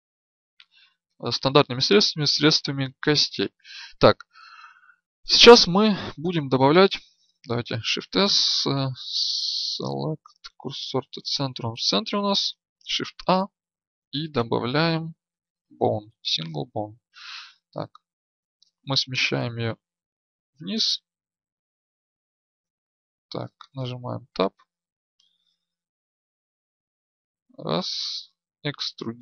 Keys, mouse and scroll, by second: 5.1-7.6 drag, 7.6 shift+s, 12.7 shift+a, 18.5-20.4 drag, 21.6-24.1 right drag, 23.8 Tab, 24.1-27.2 drag, 28.6 e.